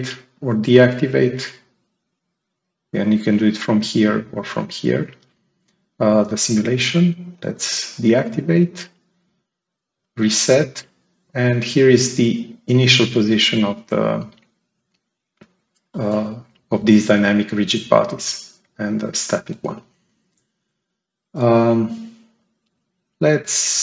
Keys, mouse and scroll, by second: 0.2 click, 7.0 click, 9.2 click, 10.1-11.9 right drag, 10.2-11.8 drag, 12.2-12.6 scroll down 1, 12.9-14.3 right drag, 13.0-14.3 drag, 23.6 click.